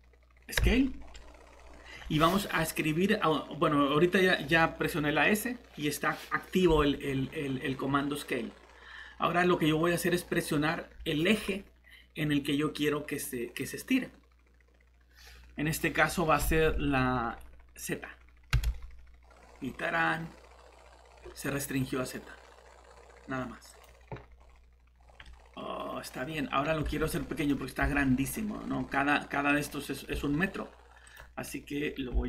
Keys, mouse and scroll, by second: 0.6 shift+s, 18.5 z, 23.7 click, 24.3 scroll down 1, 25.2 middle click, 26.1 scroll up 1, 26.8 s, 27.3 click, 27.8 s, 28.4 scroll up 1, 29.5 middle click, 29.6 scroll up 1, 30.1 s, 31.0 click.